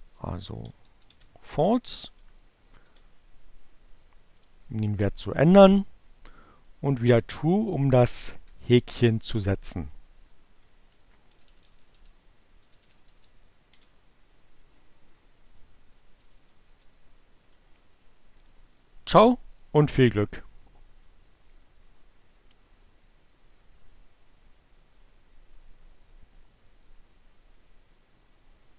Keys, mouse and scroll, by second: 1.8 Up, 2.5 Return, 4.2 click, 6.8 click, 7.7 Up, 9.4 Up, 9.5 Left, 9.6 Right, 9.7 BackSpace, 12.0-12.9 typing, 15.8 Up, 16.5 Return, 17.5 click.